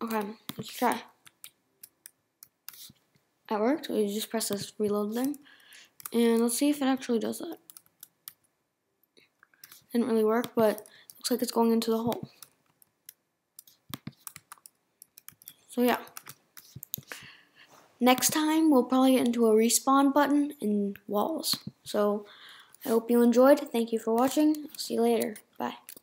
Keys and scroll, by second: 1.2 Right, 5.3 Right.